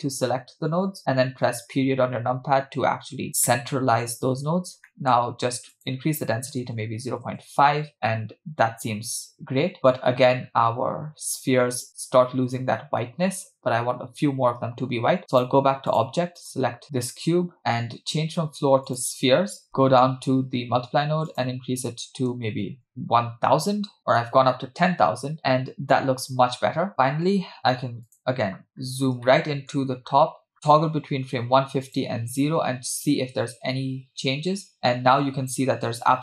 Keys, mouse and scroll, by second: 1.7 KP_Decimal, 3.1 scroll up 2, 3.3 scroll down 1, 3.5 middle click, 4.0 scroll up 2, 4.6 scroll up 2, 4.9 middle click, 5.7-7.5 drag, 15.3-16.1 drag, 16.4 click, 18.9 click, 19.7 middle click, 19.7-20.1 scroll down 2, 20.5-21.1 scroll up 4, 21.3-22.9 drag, 22.6 0, 22.8 0, 27.6 space, 28.3 click, 28.8-29.3 scroll up 3, 29.3-30.1 shift+middle drag, 30.1-30.7 scroll up 4, 32.0 click.